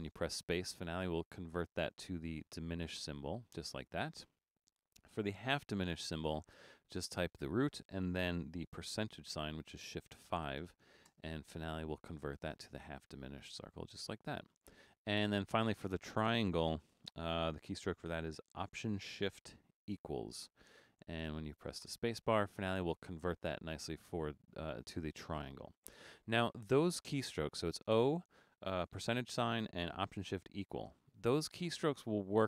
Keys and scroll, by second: 1.7 typing, 5.8 shift+d, 9.2 shift+5, 11.1 space, 16.9 shift+d, 19.9 alt+shift++, 22.0 space.